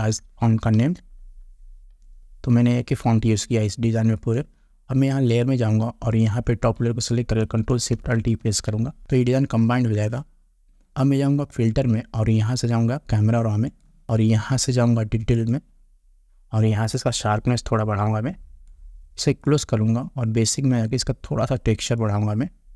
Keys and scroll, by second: 8.4 ctrl+alt+shift+e.